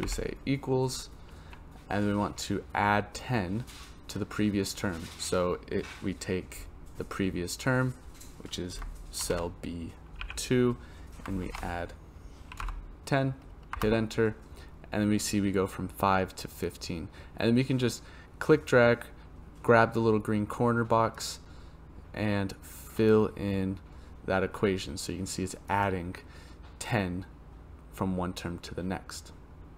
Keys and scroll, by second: 0.0 =, 9.2 shift+b, 10.2 2, 11.4 shift+=, 13.7 Return.